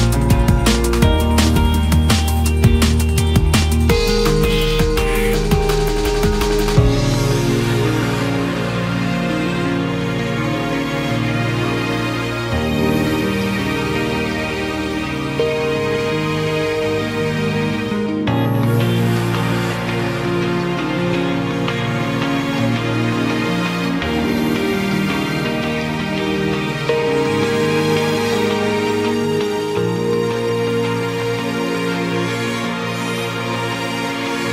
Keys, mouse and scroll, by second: 0.3 click, 1.2 Tab, 1.7-2.5 scroll down 2, 2.5 a, 4.1 g, 5.4 click, 6.2-7.9 scroll up 5, 7.9 g, 9.2 s, 11.5 g, 14.6 scroll down 1, 14.8 Tab, 16.8 Tab, 19.2 g, 21.6 g, 24.0 g, 25.4 Tab, 25.7-26.5 middle drag, 26.5 Tab, 27.1 s, 28.5 KP_1, 28.9 scroll up 1, 29.1 Tab, 29.4-29.8 scroll down 2, 29.8 scroll up 1, 30.0-30.4 scroll down 1, 30.4 Tab, 32.8 click, 33.3 1, 34.2 click.